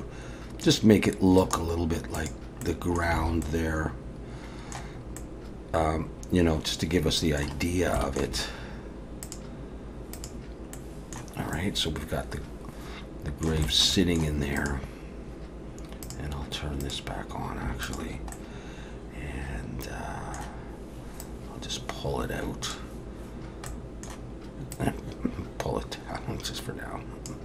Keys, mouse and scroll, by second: 1.4 right click, 2.6 middle click, 3.2 alt+a, 3.4 middle click, 5.0-5.7 scroll up 2, 5.2 middle click, 7.6-7.9 scroll down 1, 8.0 shift+middle click, 9.3 click, 10.1 click, 10.8 middle click, 11.5 middle click, 13.6 shift+middle click, 14.0 shift+middle click, 14.6 click, 16.0 click, 17.0 click, 17.8 shift+click, 18.3 middle click, 21.2 click, 23.7 middle click, 24.7 click.